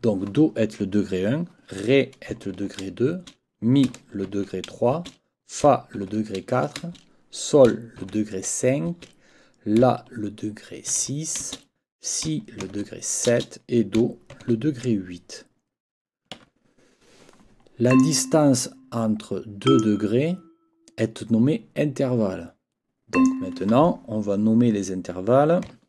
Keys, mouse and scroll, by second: 3.1 shift+space, 4.9 space, 6.8 space, 8.0 shift+9, 8.9 space, 11.4 shift+space, 13.3 space, 16.4 Escape, 17.9 click, 19.6 click, 23.1 click.